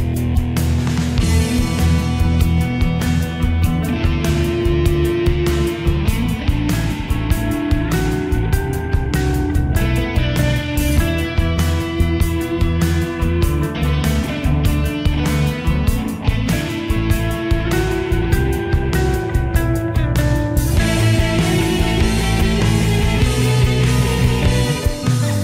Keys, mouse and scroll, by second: 0.2 click, 6.6 right click, 8.5 click, 9.5 ctrl+z, 10.4 click, 10.9 c, 11.5 Escape, 11.7-13.3 drag, 14.8 ctrl+g, 15.2-18.8 drag, 19.3 F3, 20.1-24.5 drag.